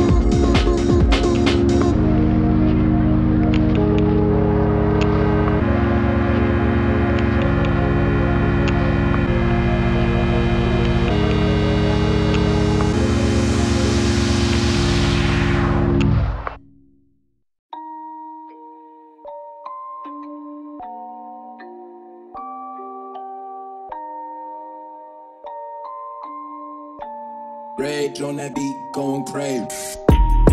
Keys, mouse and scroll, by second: 14.6 click, 22.6 Down, 22.7 typing, 23.3-30.5 drag.